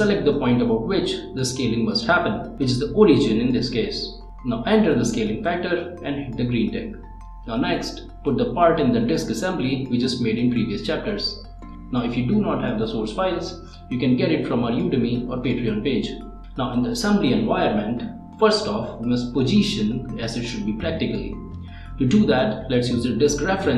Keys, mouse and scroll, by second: 0.7-1.3 typing, 1.6 Return, 2.9 click, 4.4 click, 5.8 click, 7.0 middle click, 8.5 click, 9.1 scroll up 1, 9.3 middle click, 9.8 click, 10.2 middle click, 11.1 click, 11.9 click, 13.2 ctrl+click, 13.5 ctrl+Tab, 15.2 click, 15.9 click, 17.0 scroll up 1, 17.9 click, 18.4 scroll up 1, 18.8-20.4 middle drag, 20.5 click, 20.6 scroll down 1, 20.8 middle click, 22.5 scroll down 1, 22.8 click.